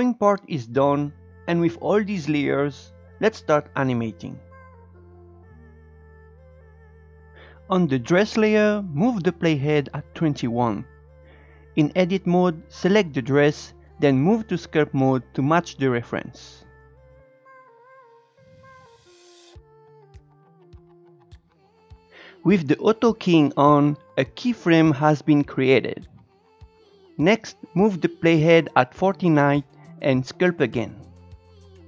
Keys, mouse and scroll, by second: 0.0-2.1 drag, 2.2 click, 2.3 scroll down 8, 2.5 shift+middle click, 2.8-3.3 scroll down 2, 3.3 Tab, 3.9 shift+middle click, 5.6-8.8 drag, 11.0 Tab, 13.1 click, 13.4 Tab, 14.6-15.6 drag, 15.8-20.9 drag, 17.8-18.6 Left, 20.9 shift+middle click, 20.9 scroll up 2, 21.1 click, 21.3 scroll down 3, 21.4 shift+middle click, 21.6-28.7 shift+drag, 29.0-29.5 scroll up 2, 29.5-30.9 shift+middle drag, 30.9 scroll down 1.